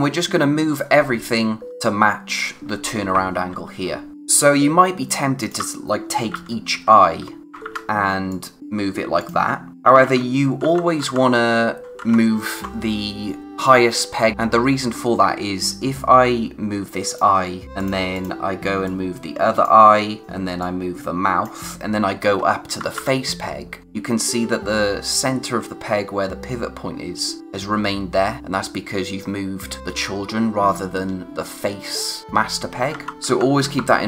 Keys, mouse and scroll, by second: 1.5 scroll down 1, 3.9-5.4 scroll down 1, 5.4 click, 6.0-8.1 typing, 8.3 click, 10.0 ctrl+z, 15.9 click, 22.2-22.9 typing, 32.7 ctrl+Num_Lock, 32.9 ctrl+z.